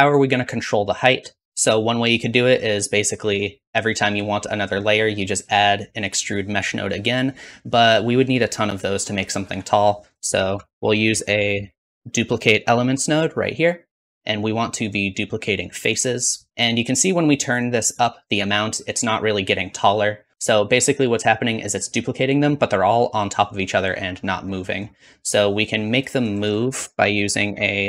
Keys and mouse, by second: 3.4-8.6 drag, 10.2 shift+a, 13.3-18.4 drag, 15.0-18.4 middle drag, 15.0-18.4 right drag, 25.6 click, 26.5 shift+a, 27.4 s.